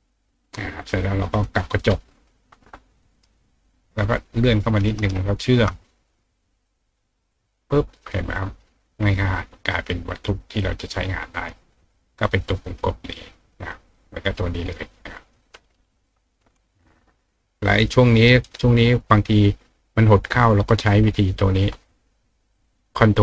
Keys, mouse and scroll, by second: 0.7 click, 1.4-3.2 drag, 3.0 ctrl+right click, 3.6 ctrl+click, 5.1 shift+click, 7.2 click, 7.9 click, 9.3 click, 12.6 click, 13.5 click, 15.0 click, 17.8 click, 18.4 right click, 20.1 click.